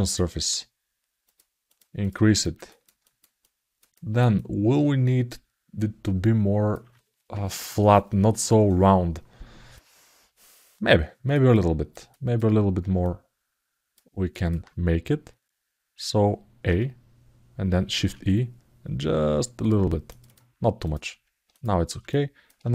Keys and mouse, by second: 1.0 click, 1.4 click, 1.8 click, 2.1 alt+middle click, 2.4 ctrl+alt+middle click, 2.8 alt+shift+middle click, 3.1 alt+middle click, 3.7 alt+shift+middle click, 4.1-6.5 alt+middle drag, 10.6 alt+middle click, 11.4 alt+middle click, 11.8 alt+shift+middle click, 12.8 alt+middle click, 14.1 alt+middle click, 17.7 shift+e, 20.0 right click, 21.3 right click, 21.8 alt+middle click.